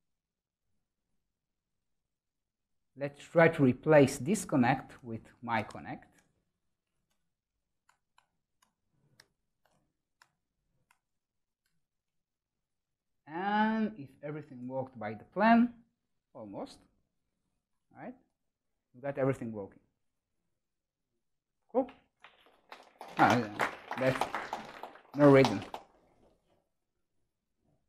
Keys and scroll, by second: 6.1 Tab, 7.0 ctrl+space, 7.7 Return.